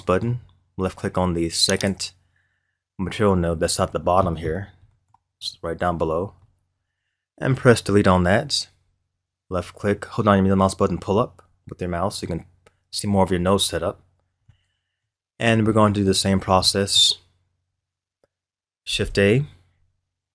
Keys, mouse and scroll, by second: 1.7 click, 4.0-5.0 scroll down 12, 5.0-6.1 middle drag, 6.1-7.3 scroll up 9, 7.3-7.9 scroll up 1, 7.9 Delete, 9.9-12.9 middle drag, 13.2-13.7 scroll up 6, 14.1 scroll down 1, 14.5 middle click, 15.3-15.7 scroll down 3, 15.7-18.9 middle drag, 18.9 shift+a.